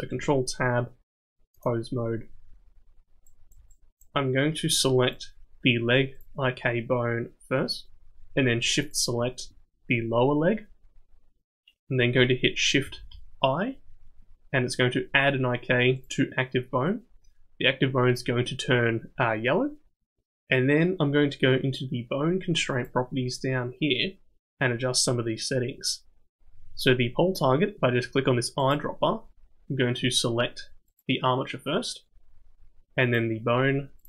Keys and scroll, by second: 0.1 ctrl+Tab, 12.8 shift+i.